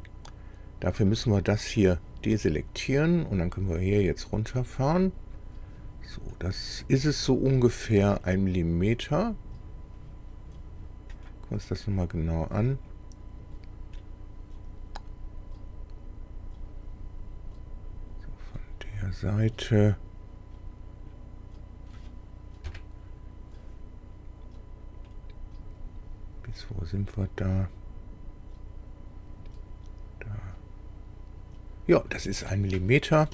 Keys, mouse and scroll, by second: 1.8 click, 4.3 click, 6.3 scroll up 2, 8.2-9.5 middle drag, 9.7 scroll up 2, 10.0-10.8 scroll down 4, 11.2 click, 11.7-13.1 middle drag, 13.4 scroll up 2, 14.0-21.3 middle drag, 22.7 KP_1, 25.1-32.3 middle drag.